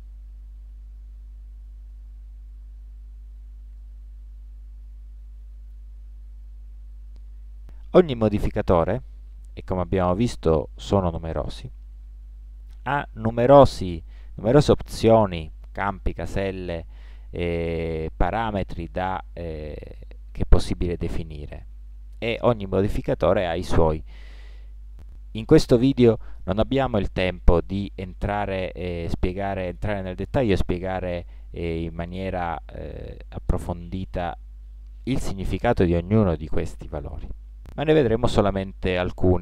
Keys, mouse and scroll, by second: 0.0 middle click, 1.3 Tab, 2.6 middle click, 5.8-8.0 middle drag, 10.0-11.4 drag, 11.4 middle click, 11.9-17.4 drag, 17.4-20.2 middle drag, 21.1-23.0 middle drag.